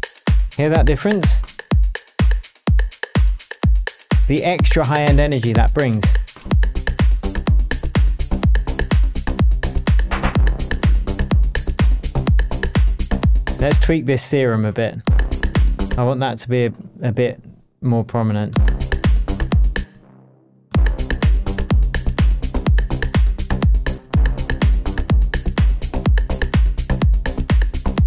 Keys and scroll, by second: 13.8 space, 18.5 space, 19.7 space, 19.9 space, 23.9 space.